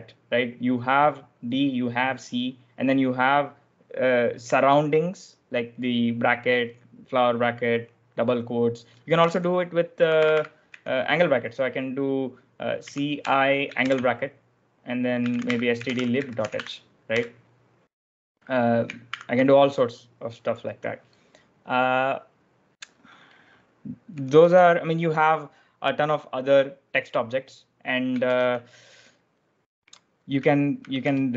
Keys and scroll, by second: 9.1-11.0 typing, 12.5-13.7 typing, 14.9-17.4 typing, 19.0 ctrl+d, 23.8-24.7 typing, 27.3-28.2 typing, 29.8-31.3 typing.